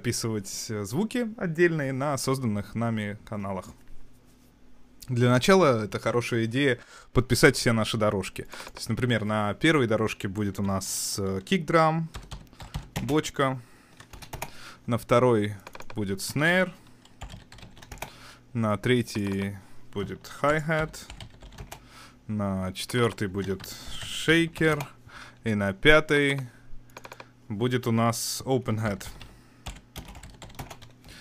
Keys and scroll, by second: 12.1-13.1 typing, 14.3 Return, 17.2-18.2 typing, 20.5-21.4 typing, 21.6 Return, 23.4-24.6 typing, 24.7 Return, 28.9-30.4 typing, 30.6 Return.